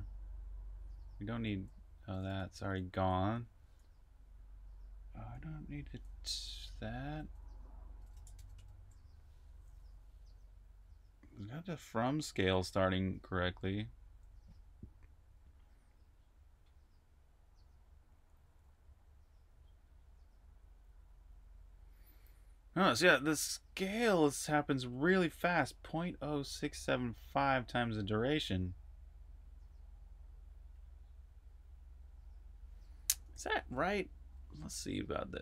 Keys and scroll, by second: 0.0-3.5 typing, 4.6-8.9 typing, 13.8 j, 33.4 super+`, 34.2-35.4 typing.